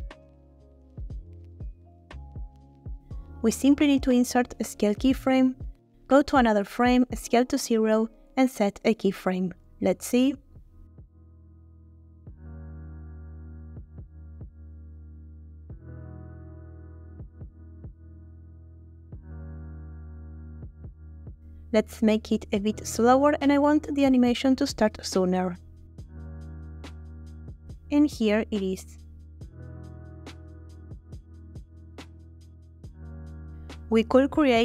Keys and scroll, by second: 5.0 i, 7.0 s, 7.5 0, 9.7 space, 14.5 space, 19.7 space, 23.6 g, 24.8 a, 25.6 g, 27.9 space, 33.4 space.